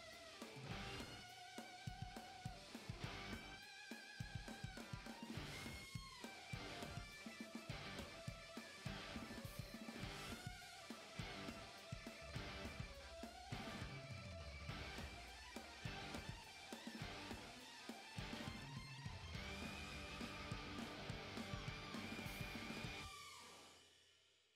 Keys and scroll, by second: 0.2 e, 3.2-4.1 typing, 5.7-6.4 typing, 8.1-9.4 typing, 10.9 s, 11.1 w, 13.7 s, 13.7 e, 14.0 s, 15.3 q, 15.5 w, 15.6 q, 19.4 r, 20.2 w, 21.3 a, 21.8 d, 21.8 s, 23.5-24.5 typing.